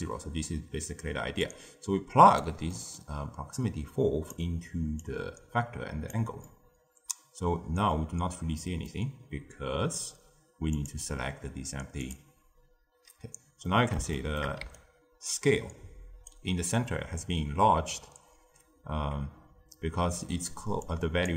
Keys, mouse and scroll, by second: 0.0-0.3 typing, 1.3 click, 2.6-3.5 middle drag, 3.5 drag, 4.9 click, 6.4-8.1 middle drag, 8.1-8.5 scroll down 1, 8.5-10.6 middle drag, 10.6 click, 13.2-13.6 scroll up 1, 13.6-14.6 middle drag, 14.6 d, 14.7-16.3 right drag, 16.3 d, 16.4 d, 20.4 d, 20.8-21.2 drag, 21.2 d.